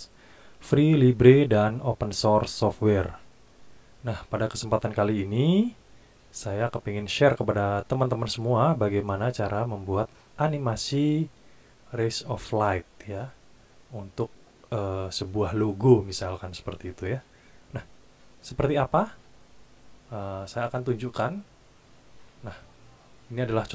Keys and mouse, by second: 19.1 click, 21.2 click.